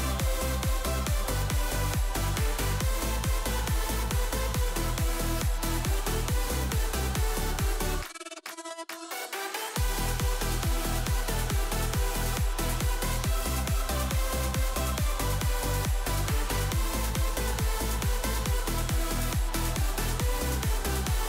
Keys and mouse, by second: 2.0-2.7 drag, 3.5-5.8 drag, 6.9 ctrl+s, 8.9 click, 11.7 click, 12.2 click, 13.2 click, 16.7 ctrl+z, 17.6 click.